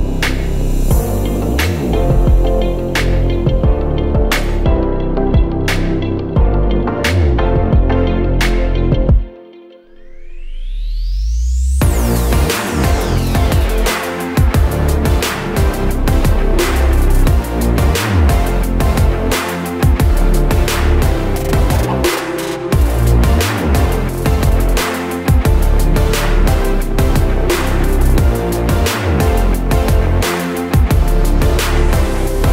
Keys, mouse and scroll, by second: 0.0 click, 1.8 click, 5.2 click, 6.1 scroll up 1, 7.4 click, 13.0 scroll down 1, 13.5 alt+scroll down 1, 16.1-17.6 alt+scroll down 2, 17.6 click, 18.7 alt+scroll up 1, 18.9 alt+scroll down 1, 20.5 click, 29.5 click.